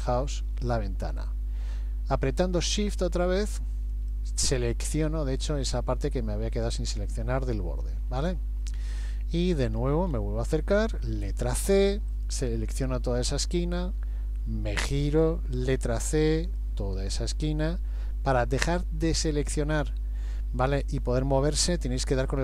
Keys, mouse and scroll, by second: 0.1 shift+middle click, 0.7 middle click, 3.9 shift+click, 6.8 middle click, 8.3 shift+middle click, 9.1-10.5 scroll up 6, 11.2-11.8 scroll up 1, 11.2 c, 14.0 middle click, 15.7 c, 18.6 shift+middle click, 19.8 middle click.